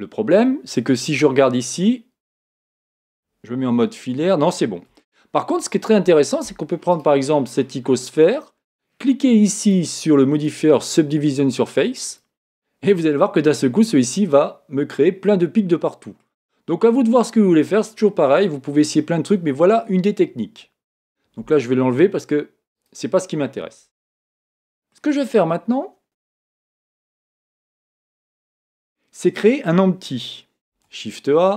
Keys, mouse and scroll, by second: 1.1 KP_1, 3.6 z, 5.0-6.9 middle drag, 6.9-8.9 right drag, 9.6 click, 13.2-15.1 middle drag, 16.3-19.5 middle drag, 17.0-17.7 scroll down 1, 19.5 scroll up 1, 19.7-20.4 scroll down 1, 22.7 click, 23.8-24.5 scroll down 1, 24.5-26.6 middle drag, 26.7 middle click, 26.7 scroll up 1, 30.7 shift+a.